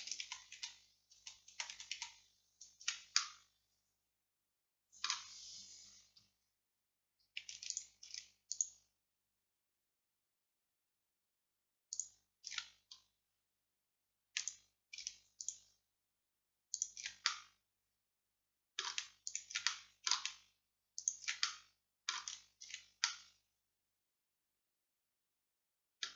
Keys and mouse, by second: 0.3-3.2 ctrl+z, 3.2-5.2 drag, 7.8-14.5 drag, 14.5-19.0 middle drag, 19.3-23.4 middle drag, 23.4-24.8 drag.